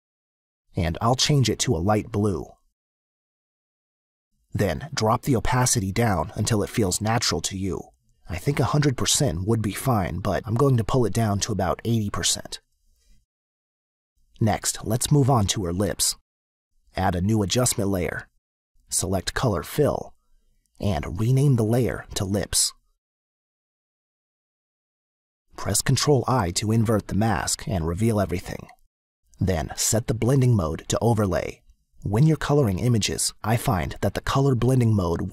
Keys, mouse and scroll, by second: 1.4 click, 2.6 click, 9.3 click, 15.0 click, 17.2 click, 22.9-24.5 typing, 24.9 Return, 26.0 click, 27.7 ctrl+i, 30.1 click, 32.1 click, 34.0 click.